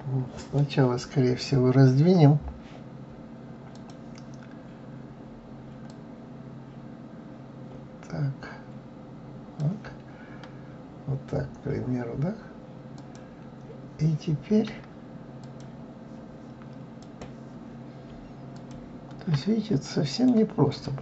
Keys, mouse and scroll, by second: 3.7 click, 5.9-8.9 drag, 13.0 click, 15.4 click, 17.0 click, 18.5 ctrl+click, 19.8 middle click, 20.7 click.